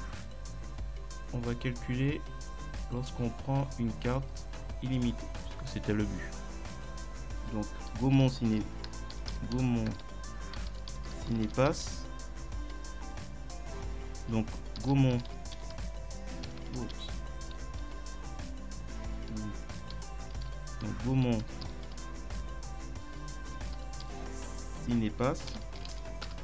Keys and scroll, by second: 8.2-11.5 typing, 14.8 shift+g, 15.2 a, 15.3 u, 15.6 m, 16.5 Delete, 17.7 Left, 19.9-22.0 typing, 23.4 shift+c, 23.8 i, 24.0 n, 24.8 2, 26.2 Return.